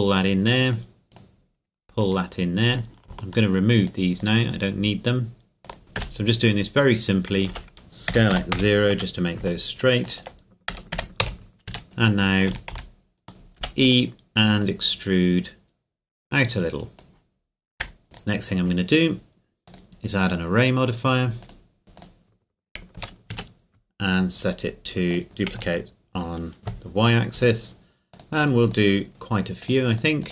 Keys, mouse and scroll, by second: 0.6 right click, 1.2 click, 2.7 right click, 3.8 shift+right click, 5.8 Tab, 7.5 r, 7.8 alt+right click, 8.1 s, 8.3 x, 8.5 KP_0, 8.9 KP_Enter, 10.0 alt+right click, 10.7 s, 10.9 x, 11.2 KP_0, 11.7 KP_Enter, 11.8 Tab, 12.0 middle click, 12.5 a, 12.7 a, 13.3 Tab, 13.6 e, 13.8 click, 17.8 Tab, 18.0 middle click, 18.1 right click, 19.7 click, 23.0 KP_0, 23.3 KP_Enter, 25.1 click, 25.6 KP_0, 26.6 KP_Enter, 28.1 click, 29.0-29.6 scroll down 1, 29.6 click.